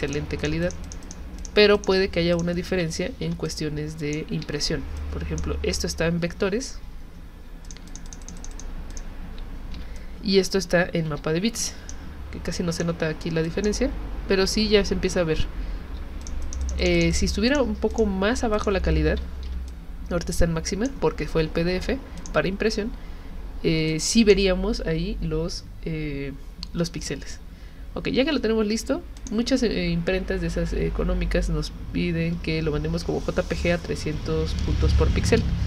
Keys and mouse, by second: 0.1 alt+click, 0.4 click, 0.6 click, 0.8 alt+click, 1.0 alt+click, 1.4 alt+click, 1.7 alt+click, 2.3 alt+click, 3.2 h, 3.5 click, 4.4 z, 5.0 click, 7.7 alt+click, 7.9 alt+click, 8.1 alt+click, 8.2 alt+click, 8.4 click, 8.5 click, 8.9 click, 9.7 h, 10.0 click, 11.1 z, 11.6 click, 12.6 click, 13.5 click, 16.5 alt+click, 16.6 alt+click, 16.8 alt+click, 17.0 alt+click, 17.1 click, 17.5 click, 17.9 click, 18.6 click, 19.5 h, 19.7-20.9 drag, 22.2 click, 23.9 click, 29.2 click.